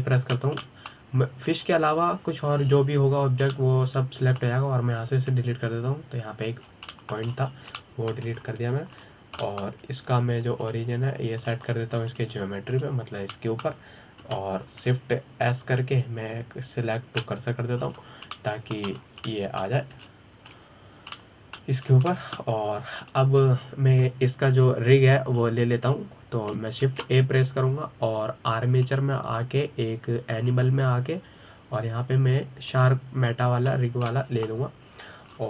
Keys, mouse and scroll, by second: 1.8 ctrl+i, 2.3-3.2 middle drag, 3.2-5.2 scroll up 2, 5.2-6.9 middle drag, 6.9 Delete, 8.3 scroll down 4, 8.6-9.0 middle drag, 9.0-9.4 scroll up 3, 9.4-10.0 shift+middle drag, 10.0-10.6 scroll down 4, 10.6 click, 11.1-12.3 middle drag, 12.3 click, 13.1-14.5 drag, 15.0-15.9 middle drag, 15.9 KP_7, 17.1 shift+s, 19.5-20.0 scroll up 6, 20.0-20.7 shift+middle drag, 20.7 scroll down 2, 21.0-21.8 middle drag, 21.8 shift+s, 22.8-23.6 middle drag, 23.6 scroll down 3, 23.8-24.7 middle drag, 24.7 click, 25.1-26.6 scroll up 3, 26.6-27.1 scroll up 2, 27.1-28.5 scroll down 2, 28.5 shift+a, 30.6-35.3 drag, 35.3-35.4 scroll down 6.